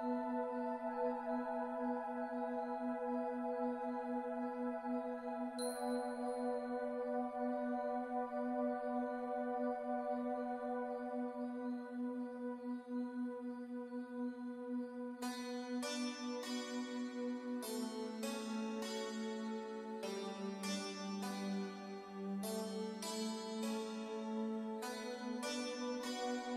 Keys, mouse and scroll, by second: 3.7 click, 12.6 click, 17.0 click, 19.4 click.